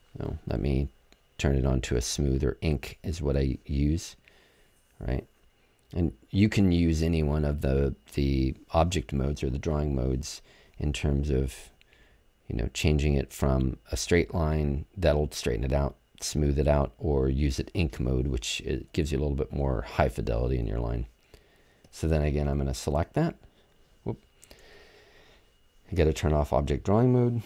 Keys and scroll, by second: 24.6 super+z.